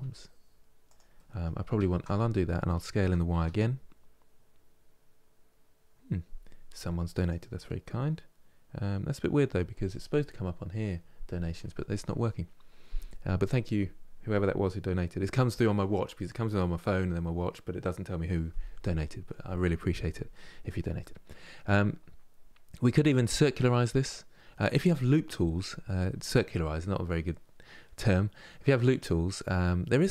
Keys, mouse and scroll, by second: 0.8 middle click, 1.3 ctrl+z, 1.5 ctrl+z, 1.8 middle click, 2.7 s, 20.7-21.7 middle drag, 21.7-22.7 scroll up 2.